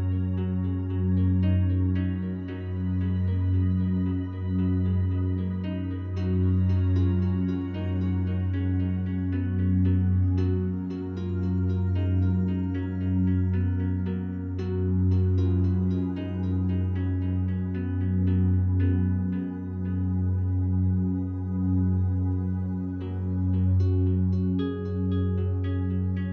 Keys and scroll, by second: 0.5 space, 4.1 g, 24.7 Delete.